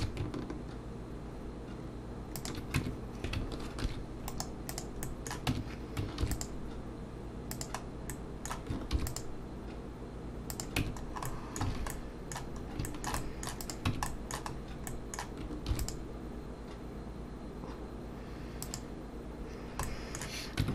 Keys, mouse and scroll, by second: 0.0 ctrl+b, 2.8 Tab, 3.9 ctrl+2, 4.3 right click, 5.0 middle click, 5.5 Tab, 6.2 ctrl+r, 8.1 middle click, 9.0 ctrl+r, 10.8 Tab, 11.0 scroll down 3, 11.3 middle click, 11.7 alt+a, 11.9 middle click, 12.6 scroll up 3, 12.9 shift+middle click, 13.2 middle click, 13.6 click, 13.9 Tab, 14.1 middle click, 14.5-15.4 scroll up 2, 14.9 middle click, 15.7 ctrl+r, 19.8 middle click, 20.6 Tab.